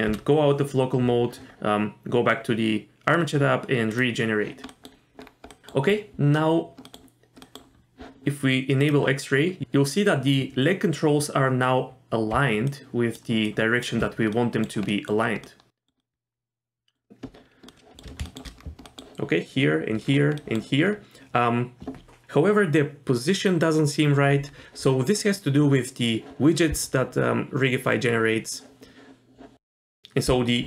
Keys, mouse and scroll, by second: 3.9 click, 4.7 middle click, 5.2 scroll up 1, 5.5 middle click, 6.9 middle click, 7.4 middle click, 8.8 click, 9.4 scroll up 1, 12.3 d, 12.7 click, 13.1-13.5 d, 13.5 click, 13.8 d, 13.9 d, 14.4 middle drag, 14.9 middle click, 15.5 middle click, 16.0-16.9 middle drag, 17.7 middle drag, 18.3 shift+middle click, 18.6-18.9 scroll up 1, 18.9 middle click, 20.1-20.4 scroll down 1, 20.4 middle drag, 20.4 scroll up 1, 20.6-20.9 scroll down 1, 20.9-21.4 scroll up 1, 29.8 middle click.